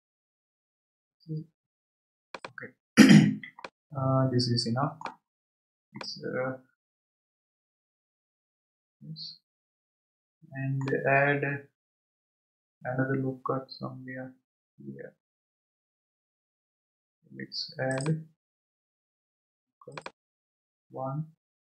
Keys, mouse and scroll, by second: 3.6-5.4 middle drag, 5.4 scroll down 2, 6.0-9.0 middle drag, 17.9-21.7 drag.